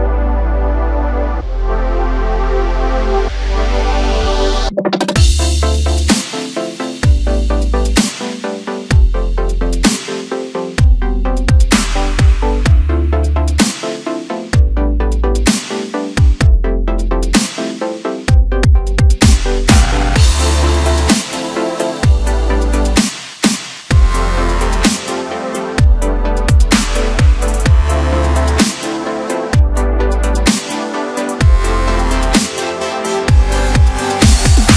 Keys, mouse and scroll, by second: 1.2 KP_Add, 1.7 KP_Add, 2.5 KP_1, 5.2 s, 7.4-8.4 scroll down 7, 8.4-9.1 ctrl+KP_2, 9.9-10.6 scroll up 4, 10.8 s, 12.9-13.2 scroll down 1, 13.2 Tab, 13.5-13.8 scroll down 1, 13.8-14.4 middle drag, 14.4-16.0 scroll up 1, 16.2 ctrl+1, 17.5-18.6 right drag, 18.6-19.2 scroll down 1, 19.2 KP_1, 19.8 Tab, 21.0-22.4 drag, 22.4-22.8 scroll up 2, 23.5 drag, 24.6 click, 25.3-26.3 scroll down 1, 26.3 ctrl+r, 28.4 s, 31.1-32.6 drag, 32.6 s.